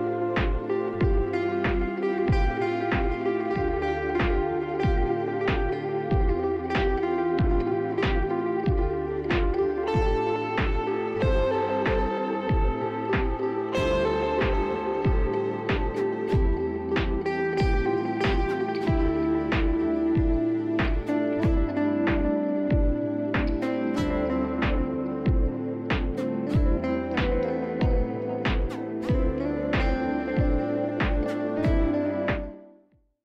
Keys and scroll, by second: 17.5 ctrl+z, 17.5 ctrl+shift+e, 17.5 ctrl+F4, 18.0-20.7 typing.